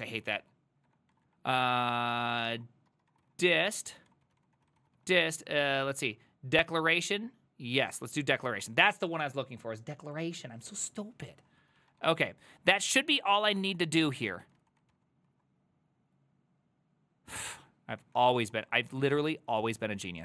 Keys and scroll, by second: 0.0-9.0 typing, 7.9 ctrl+c, 11.7-12.5 typing, 14.1 ctrl+a, 14.3-15.4 typing, 14.4 ctrl+c, 17.8-19.2 typing.